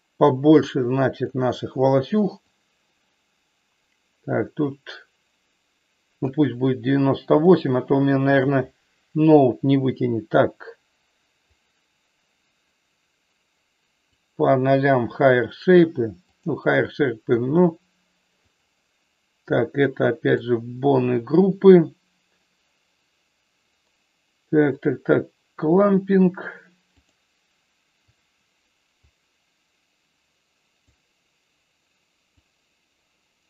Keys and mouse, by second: 2.6-6.2 drag, 7.4 middle click, 11.4-14.2 drag, 16.3 click, 18.3-20.3 drag, 27.1 click, 28.2 click, 29.3-30.9 drag, 32.7-33.4 drag.